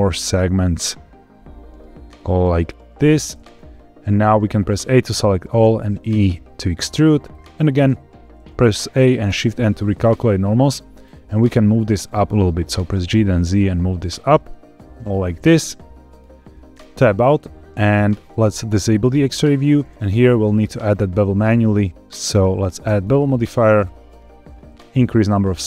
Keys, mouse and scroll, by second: 0.7-2.9 scroll up 1, 2.9 click, 3.2 middle click, 4.6 a, 5.5 e, 7.2 click, 8.5 a, 9.2 shift+n, 10.3 middle click, 11.5 middle click, 12.6 g, 12.8 z, 14.9 click, 15.2 middle click, 16.6 Tab, 19.0 click, 19.9 click, 22.2-23.6 drag, 25.0 click, 25.5-25.6 shift+drag.